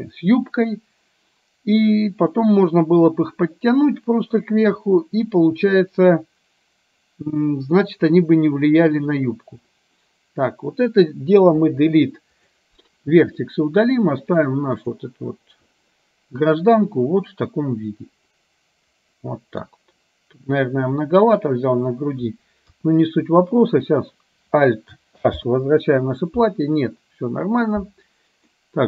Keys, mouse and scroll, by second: 11.6 Delete, 14.3-15.0 drag, 17.3-19.6 middle drag, 22.7 KP_1, 25.5 alt+h, 28.5-28.8 middle drag.